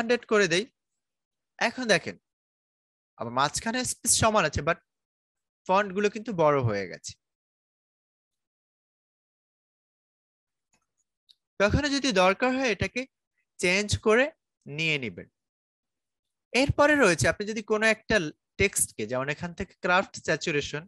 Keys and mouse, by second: 0.5 Return, 2.3-4.9 drag, 4.9-9.1 drag, 9.1-11.5 drag, 11.5 Return, 15.5-20.8 drag.